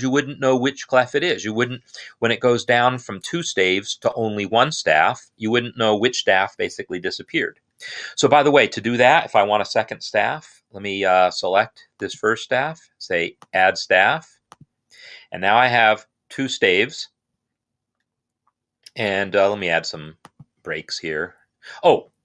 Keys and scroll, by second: 10.7 i, 20.8 Return.